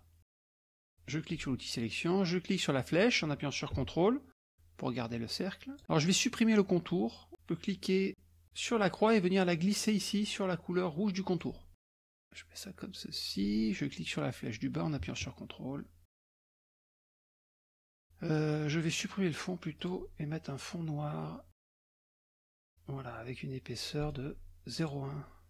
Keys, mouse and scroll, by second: 1.3 click, 2.8-5.8 drag, 8.7-11.6 drag, 11.8-13.7 drag, 14.4-16.3 drag, 16.5 click, 19.8 click, 21.6 click, 22.5 scroll up 1, 24.8 click.